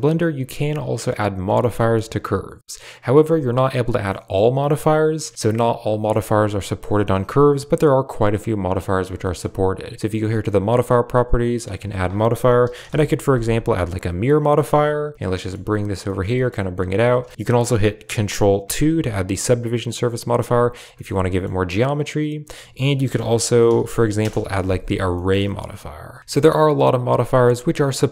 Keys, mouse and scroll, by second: 0.1 click, 1.4 click, 1.7 shift+click, 3.9 middle click, 9.1 middle click, 11.6-14.1 drag, 14.2-16.9 typing, 14.4 click, 14.6 Tab, 15.9 click, 17.3 Tab, 18.5 ctrl+2, 19.7 click, 20.8 shift+middle click, 21.1 middle click, 22.4-24.1 drag, 23.7 r, 25.0 middle drag, 25.3 shift+middle click.